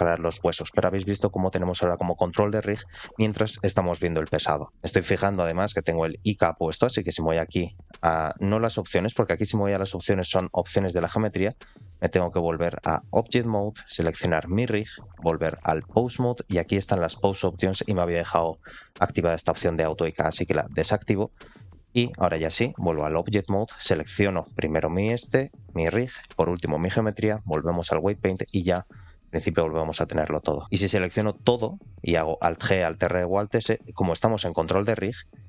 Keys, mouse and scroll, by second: 5.2-6.3 middle drag, 8.8-10.2 drag, 11.4 middle click, 12.4-13.1 drag, 13.9 click, 14.9-15.6 drag, 16.7-21.3 drag, 21.9-22.9 drag, 23.3-23.6 middle drag, 26.1 shift+click, 27.2-27.9 drag, 28.2 middle click, 28.9 ctrl+click, 29.4 r, 31.2 a, 32.5 alt+r, 32.7 alt+g, 33.0 alt+s, 34.1 shift+middle click, 35.2 ctrl+click.